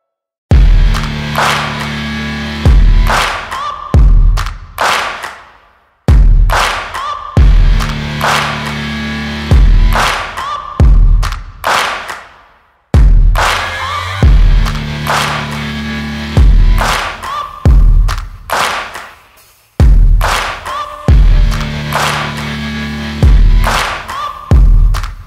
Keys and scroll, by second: 25.1 ctrl+z.